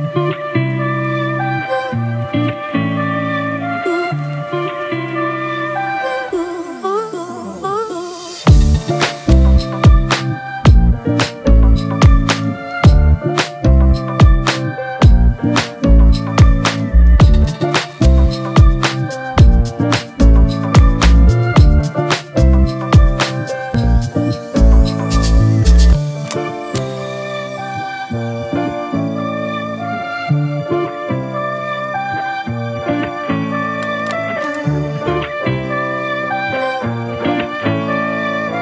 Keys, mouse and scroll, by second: 1.0 double click, 7.2 alt+click, 14.7 right click, 16.8-17.2 typing, 20.3-20.6 typing, 22.6-23.0 typing, 24.7 double click, 37.3 double click.